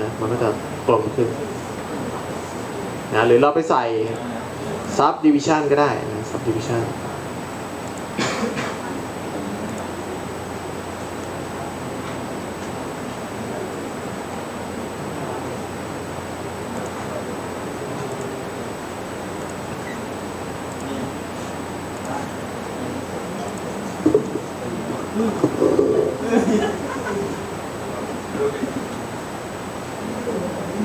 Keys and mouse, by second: 4.1-14.3 drag.